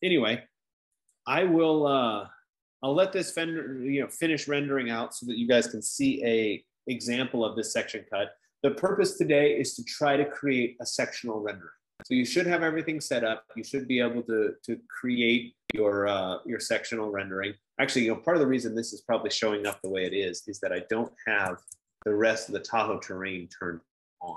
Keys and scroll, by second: 5.0 F15.